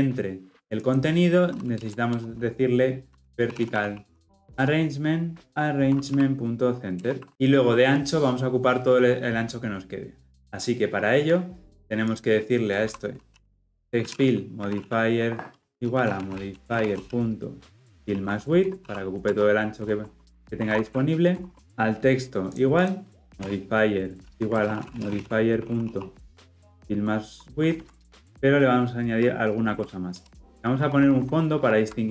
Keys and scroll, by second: 6.0 Return, 15.7 Return, 28.0 Return.